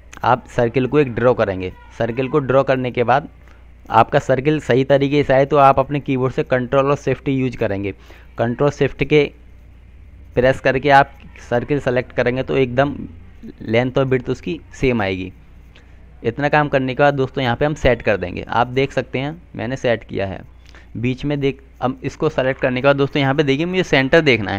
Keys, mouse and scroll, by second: 1.7 click, 9.2 click, 23.2 click.